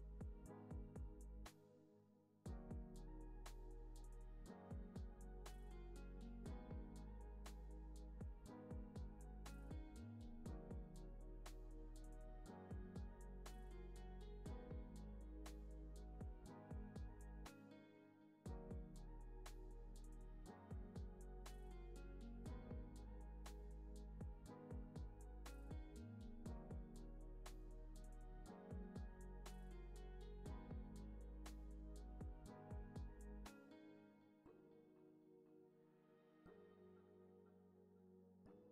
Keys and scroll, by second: 0.6 z, 14.2 u, 16.1 u, 17.7 z, 18.8-22.0 typing, 30.1 super+=, 31.0 space.